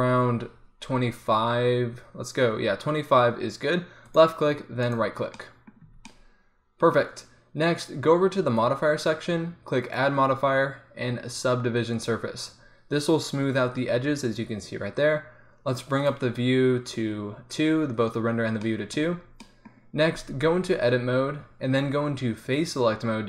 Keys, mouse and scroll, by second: 6.0 Tab, 12.1-16.0 middle drag, 18.4 middle click, 20.5 Tab.